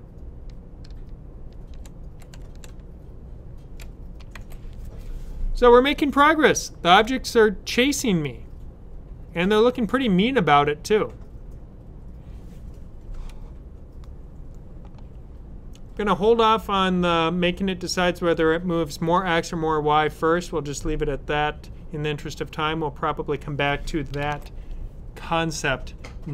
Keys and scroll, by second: 0.7 typing, 4.2 super+w, 24.1 super+s.